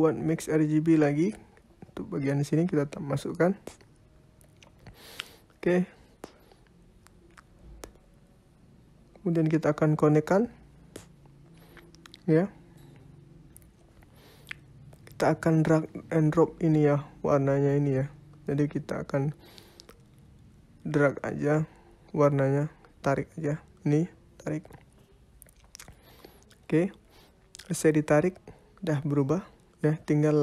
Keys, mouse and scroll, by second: 4.9 click, 8.0 click, 8.6 click, 11.0 click, 22.8 click, 28.4 click, 30.2 click.